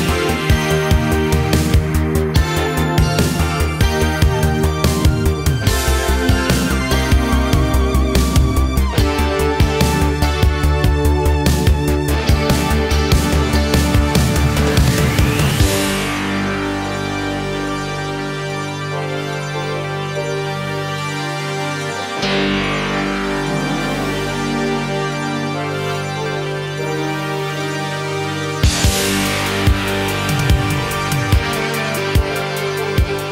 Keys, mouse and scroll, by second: 0.7 click, 1.3 click, 1.8 click, 3.6 click, 5.2 click, 6.1 click, 6.9 click, 7.3 click, 7.7 click, 8.6 click, 9.6 click, 10.7 click, 21.8 click, 22.2 ctrl+click.